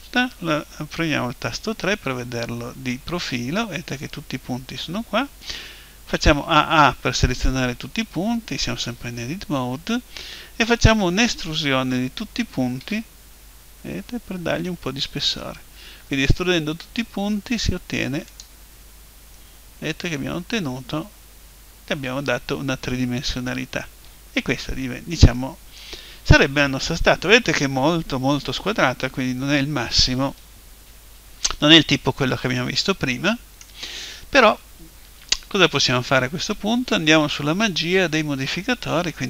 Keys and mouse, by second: 2.0 KP_3, 6.4 a, 6.7 a, 12.8 e, 18.4 click, 20.1-21.2 middle drag, 25.4-27.4 middle drag, 31.8-33.7 middle drag.